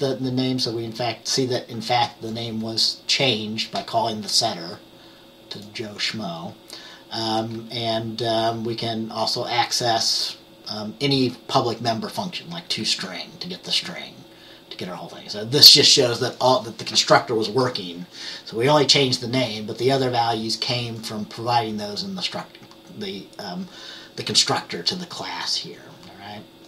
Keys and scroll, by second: 7.5 F10, 12.8 F10.